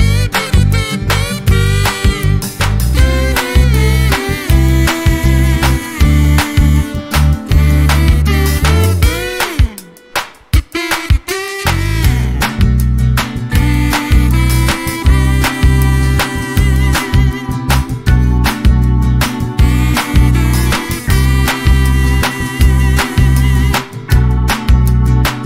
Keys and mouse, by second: 0.2 click, 0.4 click, 3.3 click, 3.7 click, 5.3 click, 6.3 click, 7.1 click, 8.2-10.1 typing, 11.5 click, 12.5 click, 13.1 click, 14.7 Right, 15.4 BackSpace, 15.6 Return, 16.7 F12, 18.0 click, 19.0 click, 25.3 click.